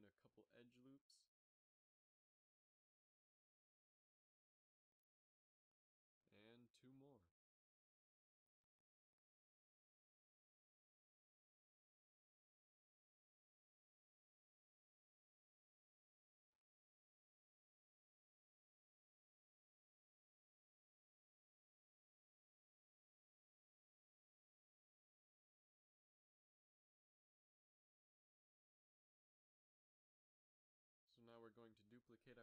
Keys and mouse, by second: 0.7 s, 5.5 z, 7.0 z, 7.5 ctrl+r, 9.4 s, 12.8 Tab, 15.0 ctrl+s, 25.7 KP_Divide, 29.1 Tab, 29.8 a, 30.0 a, 31.0 l, 31.9 shift+d.